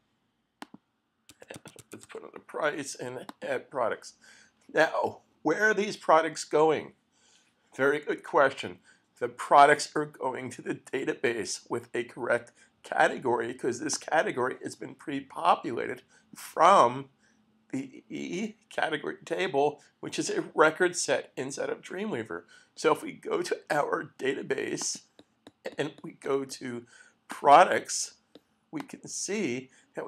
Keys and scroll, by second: 1.0-2.6 typing.